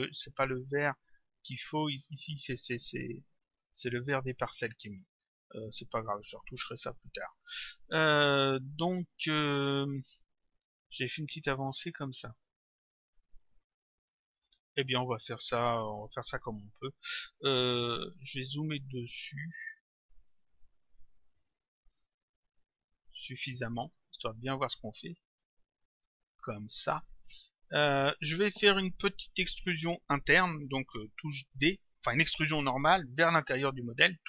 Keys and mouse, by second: 5.1 click, 6.8 click, 12.4 click, 14.1 click, 15.5 click, 18.0 click, 19.7 click, 21.0 click, 22.9 click, 24.4 click, 26.0 click, 31.6 d.